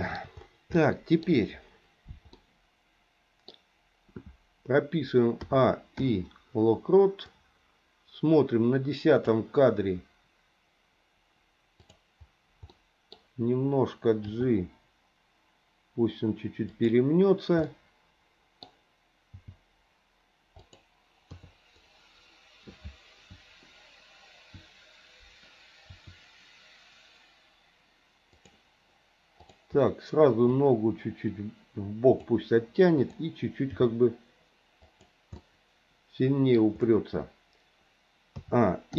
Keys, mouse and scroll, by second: 0.7 shift+middle click, 2.3-5.3 middle drag, 5.4 a, 6.0 i, 7.3-9.3 drag, 11.7 click, 12.7 middle click, 14.3 g, 17.7 middle click, 18.6-19.3 scroll down 1, 19.3 g, 21.3 KP_3, 25.9 r, 29.4 click, 30.6-32.3 drag, 33.6 g, 35.3-36.3 scroll up 1, 36.3 middle click, 36.5 scroll down 1, 38.4 a.